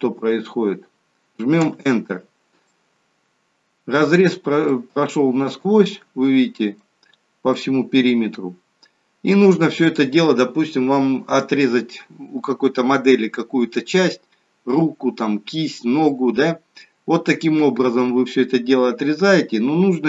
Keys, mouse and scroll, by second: 2.8 middle click, 4.6 middle click, 19.4 middle click.